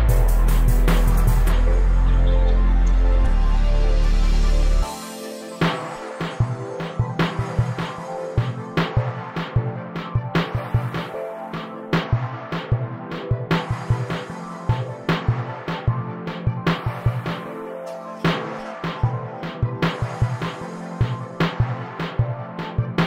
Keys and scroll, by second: 7.5 m, 13.6 m, 19.3 s.